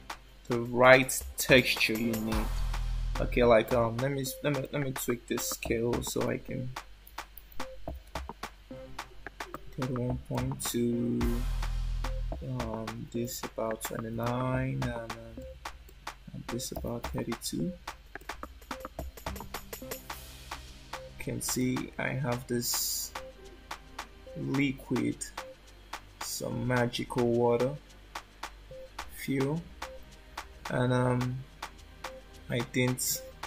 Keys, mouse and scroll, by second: 4.6 click, 10.3 click, 15.8 click, 19.4 scroll up 4, 21.9 middle click, 29.2 scroll down 3, 31.2 shift+middle click.